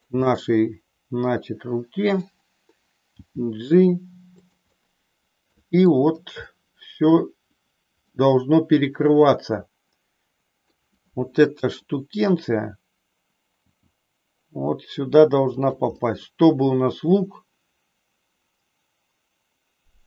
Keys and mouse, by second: 0.3-2.2 middle drag, 3.1 g, 4.9-6.0 middle drag, 6.6 shift+middle click, 8.0-10.7 middle drag, 13.6 g, 16.0-20.0 middle drag.